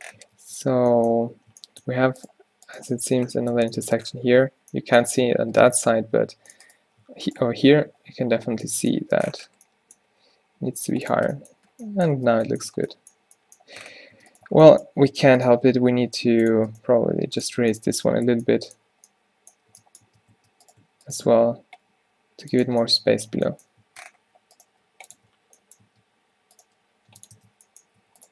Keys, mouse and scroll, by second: 0.3 Tab, 1.3 z, 3.1 z, 4.5 middle click, 6.1 z, 8.0 o, 8.4 z, 10.1 g, 11.2 Tab, 12.2 Tab, 12.7 Tab, 13.9 Tab, 14.2 Tab, 14.5 Tab, 15.8 g, 16.9 g, 17.6 Tab, 19.8 Tab, 20.1 Tab, 20.4 Tab, 21.3 g, 22.7 Tab, 23.9 Tab, 24.8 g, 25.2 Tab, 25.9 Tab, 26.7 g, 27.4 Tab, 28.1 a.